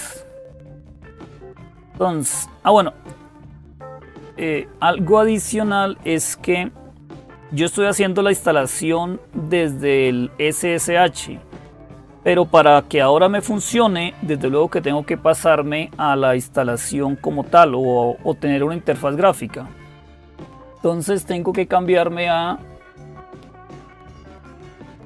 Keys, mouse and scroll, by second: 3.4-5.2 drag, 22.8 click, 24.8 click.